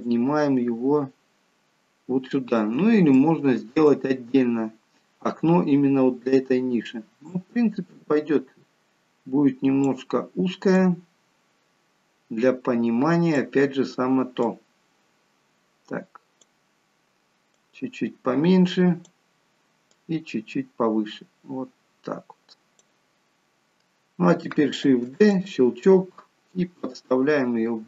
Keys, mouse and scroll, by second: 0.0 click, 0.0 shift+d, 3.3 shift+middle click, 4.0-4.7 scroll up 4, 5.3-6.8 scroll down 1, 10.7 click, 14.4 click, 19.9 click, 24.9 shift+d, 26.1 click.